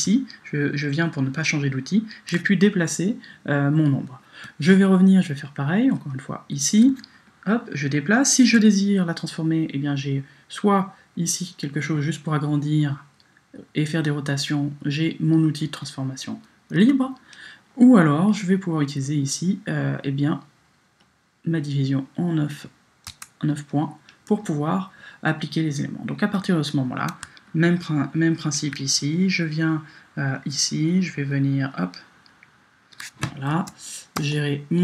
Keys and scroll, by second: 16.8 Return, 23.1 Return, 33.5 Return.